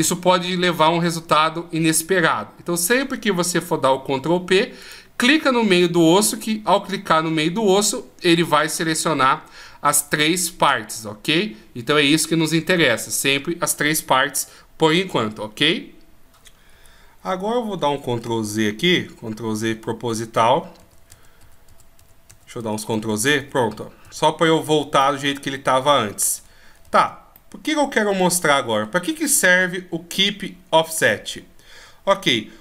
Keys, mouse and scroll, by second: 4.6 right click, 9.9 right click, 18.2 ctrl+z, 18.8-20.9 ctrl+z, 21.2 ctrl+z, 21.5 ctrl+z, 21.8 ctrl+z, 22.1 ctrl+z, 22.4 ctrl+z, 23.1 ctrl+z, 24.5 middle click, 25.4 ctrl+z, 26.3 ctrl+z, 26.8 middle click.